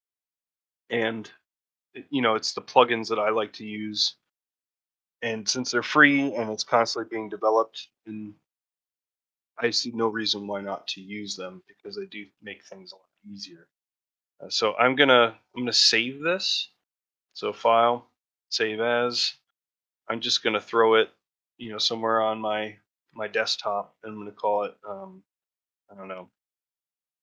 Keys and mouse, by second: 0.1 shift+middle drag, 3.7 middle drag, 15.6 middle drag.